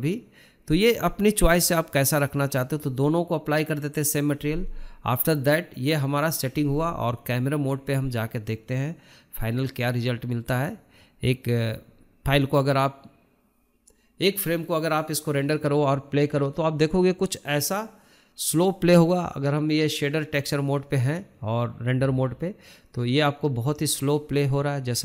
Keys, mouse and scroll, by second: 2.4-5.1 drag, 5.4 click, 5.9-6.6 scroll down 4, 6.1-6.5 shift+middle drag, 6.6 middle click, 7.1 KP_0, 8.3-8.7 shift+middle drag, 8.7 scroll up 3, 9.0-12.1 shift+middle drag, 14.7-16.5 drag, 17.2-19.0 drag.